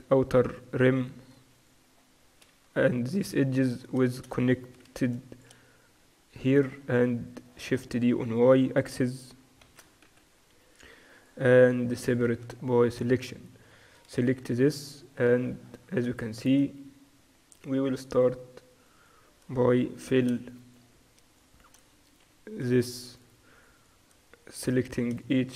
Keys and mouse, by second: 0.5-1.8 right drag, 1.3 a, 1.8-2.8 middle drag, 2.8 KP_6, 3.1 KP_2, 3.4 KP_4, 4.9 shift+b, 6.4-9.3 drag, 9.3 middle click, 9.7 shift+d, 11.8 p, 12.5 Tab, 13.2-14.8 drag, 14.3 KP_Divide, 14.8 Tab, 15.5 middle click, 17.9-25.5 drag, 19.9 f, 22.3 f.